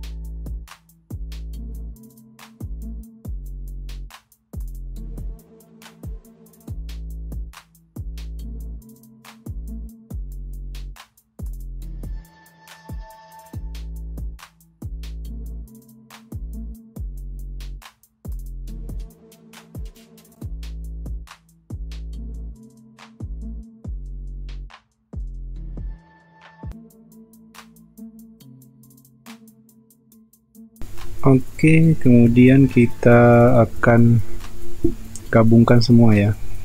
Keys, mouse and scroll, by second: 6.3 typing, 10.0 space, 10.5 ctrl+b, 12.3 space, 13.3 space, 14.0 space, 16.5-17.1 typing, 18.3 ctrl+alt+z, 19.0 ctrl+alt+z, 20.1 ctrl+alt+z, 21.8 space, 22.8 ctrl+alt+z, 24.7 typing, 26.2 space, 27.8 ctrl+b, 29.1 space, 29.5 space, 30.1 space, 33.6 space.